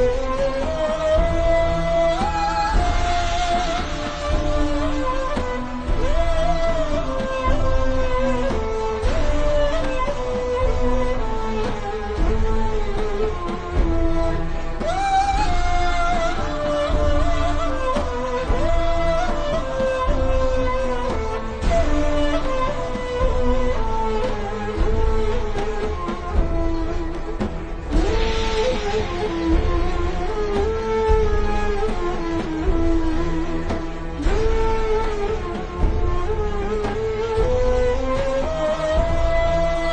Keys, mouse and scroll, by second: 0.9 click, 4.3 a, 4.6 click, 7.0 v, 7.3 click, 7.9-8.4 alt+shift+scroll down 2, 9.7 scroll down 1, 10.6 alt+shift+scroll up 1, 11.0 click, 11.4 click, 12.0-12.3 alt+shift+scroll up 2, 12.3 click, 13.4 a, 13.6 ctrl+z, 14.2 click, 18.3-19.1 alt+shift+scroll down 2, 19.5 click, 20.0 v, 20.1 click, 20.3-20.8 alt+shift+scroll down 2, 20.8 click, 25.8 alt+shift+scroll up 3, 26.0 a, 26.1 click, 31.1-32.5 alt+shift+scroll down 2, 33.1 v, 33.3 click, 36.4 alt+shift+scroll down 1, 37.0 alt+shift+scroll down 1, 37.5-37.9 ctrl+scroll down 2, 38.0 alt+shift+scroll up 1, 38.5 scroll down 1, 38.8 click.